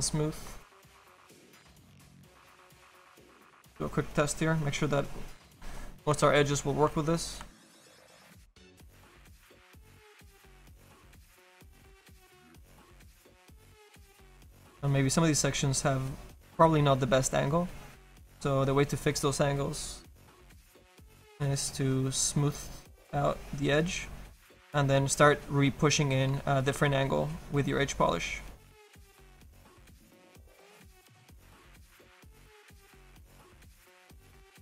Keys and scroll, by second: 26.7 s.